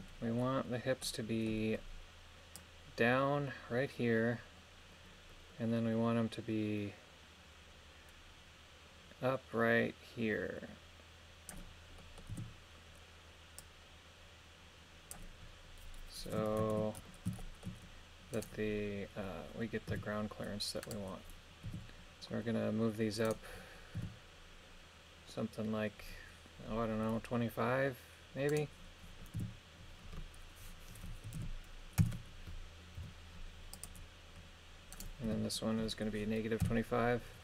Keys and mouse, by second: 1.0 middle click, 2.6-11.6 drag, 12.0 middle click, 12.4 KP_3, 13.6-15.2 drag, 16.6 ctrl+KP_1, 17.4 shift+middle click, 18.4 right click, 19.9 r, 21.7 r, 23.3 right click, 24.0 r, 28.5 right click, 29.4 r, 31.3 KP_2, 31.4 KP_5, 32.0 Return, 33.0 i, 34.9 right click, 35.3 r, 36.6 KP_Subtract.